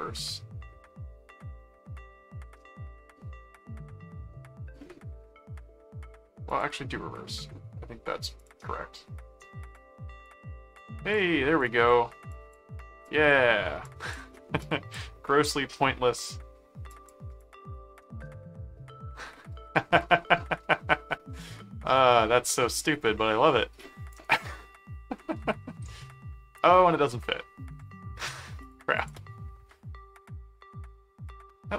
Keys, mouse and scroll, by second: 2.6-4.3 middle drag, 6.5 click, 8.4 click, 9.7 click, 10.8 click, 11.6 click, 12.3 click, 13.0 click, 13.8 click, 14.6 click, 15.7 middle click, 16.9-24.1 drag, 24.3 middle click, 25.2 middle click, 25.9 middle click, 26.8 middle click, 28.6 click, 30.3-31.5 middle drag.